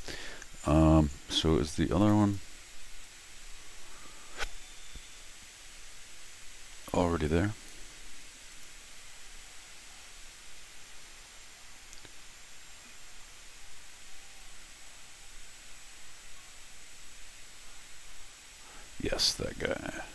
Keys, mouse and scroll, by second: 2.0 click, 2.2 click, 3.0-7.7 drag, 8.5 click, 10.0 middle click, 10.1-11.5 scroll down 4.